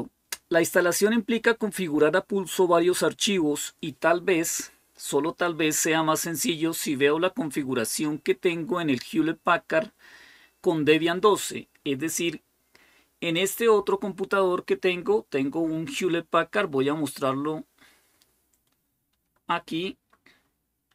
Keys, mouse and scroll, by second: 13.1 click, 18.9 super+7.